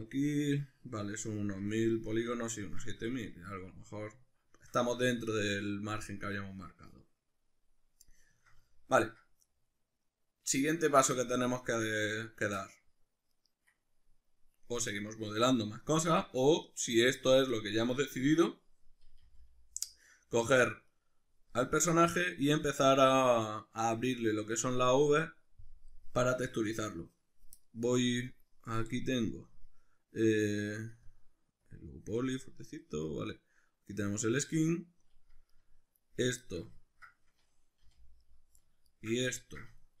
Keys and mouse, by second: 1.4 Tab, 2.1-13.3 shift+middle drag, 2.9 a, 13.3 right click, 19.3 g, 21.0 right click, 31.0 click, 31.6 click, 32.6-34.0 middle drag, 34.0 click, 35.5 right click, 36.5-38.3 ctrl+shift+middle drag, 37.9 g, 38.3 right click, 38.9 shift+right click, 39.3-40.0 ctrl+middle drag.